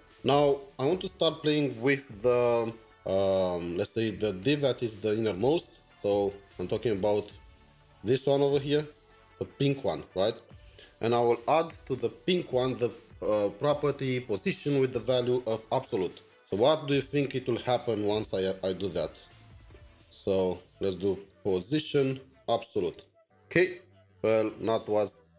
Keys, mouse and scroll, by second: 7.8 typing, 8.3 alt+\, 16.3 alt+\, 16.7 Escape, 17.1 Escape, 18.1 alt+\, 21.1-22.3 typing, 22.9 Return.